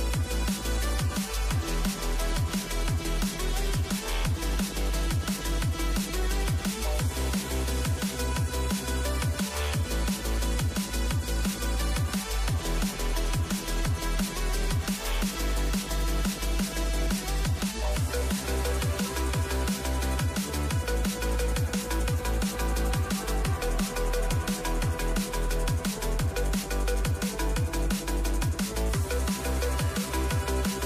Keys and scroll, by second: 8.9-11.5 typing, 11.9 Return, 12.7-13.4 typing, 23.2 Up, 23.7 Up, 24.3 Up, 25.0 Up, 25.9 Return.